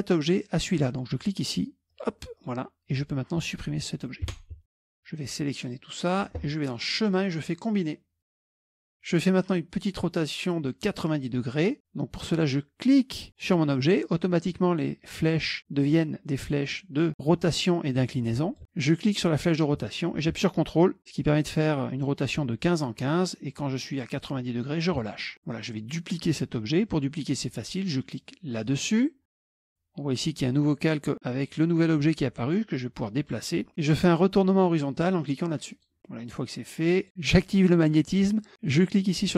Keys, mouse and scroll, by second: 1.9 click, 2.4-3.5 drag, 4.3 Delete, 4.7 KP_Subtract, 4.7 KP_Subtract, 5.2-6.3 drag, 7.0 click, 8.6 click, 13.5 click, 18.1 click, 19.0-24.9 drag, 28.7 click, 29.6 click, 32.6-33.7 drag, 35.8 click, 36.3 click, 37.4 click, 38.5 click.